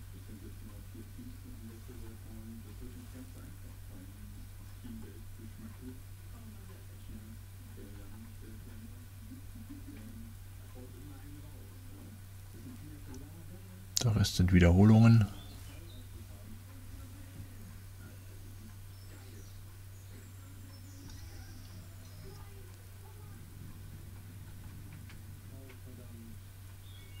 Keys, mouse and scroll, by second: 1.1 middle click, 2.8 click, 2.8 middle click, 3.6 middle click, 5.1 click, 6.9 click, 8.5 click, 8.9-10.1 drag, 11.2 click, 13.0 click, 15.3 click, 19.3 click, 22.4 click, 24.9 click, 27.1 click.